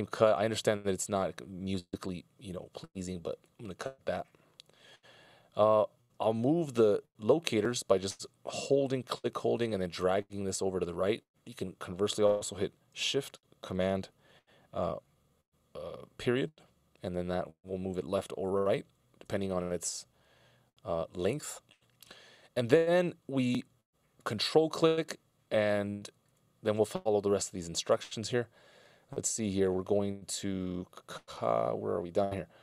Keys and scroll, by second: 5.4 c, 15.4 shift+super+Right, 16.7 shift+super+., 18.4 shift+super+,, 18.9 shift+super+., 19.3 shift+super+,.